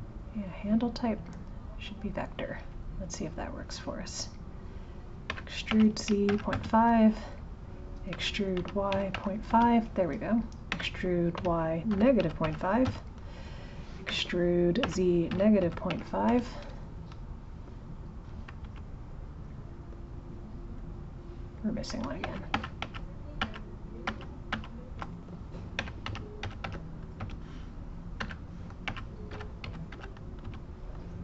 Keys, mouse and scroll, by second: 0.5-1.9 right drag, 1.9 click, 2.7 click, 5.3 e, 19.5 click, 20.8 click, 21.6 click, 22.6 ctrl+z, 25.8 e.